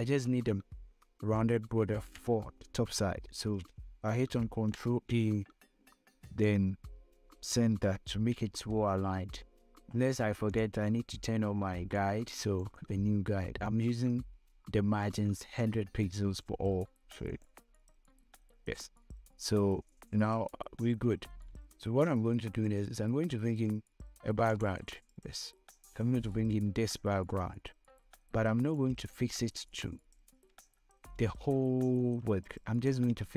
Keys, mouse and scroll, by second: 2.0 v, 4.7 ctrl+a, 6.6 click, 8.7 ctrl+d, 10.8-15.4 drag, 17.6 click, 24.8-31.6 drag.